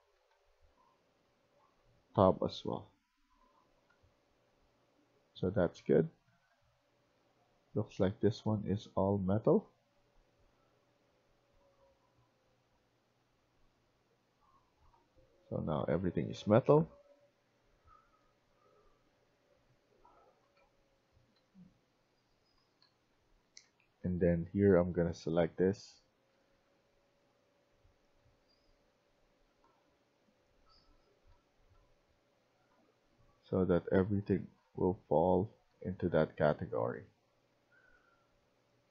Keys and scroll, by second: 0.0-1.5 typing, 3.1-3.8 typing, 5.0-7.1 typing, 14.3-16.3 typing, 17.8-18.3 typing, 19.7-20.6 typing, 21.9-24.0 typing, 25.4-26.7 typing, 27.8-29.7 typing, 31.2-36.9 typing.